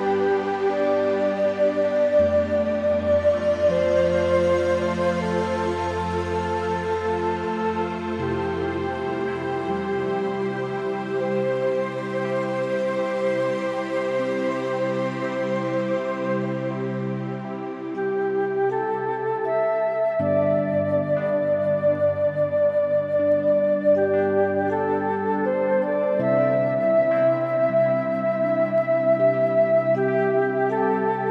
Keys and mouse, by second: 0.6 middle click, 1.1 click, 1.1 right click, 1.9 shift+middle click, 2.3 middle click, 3.7 click, 7.0-9.1 typing, 8.7 click, 12.3 click, 12.9 middle click, 14.3 shift+middle click, 15.6 shift+middle click, 16.7 ctrl+z, 16.8 ctrl+z, 17.0 ctrl+z, 17.3 ctrl+z, 18.2 click, 18.7 r, 19.2 z, 22.1-23.2 drag, 24.4 g, 25.9 middle click, 27.7 `, 28.5 g, 29.6 click, 29.8 click, 30.1 middle click.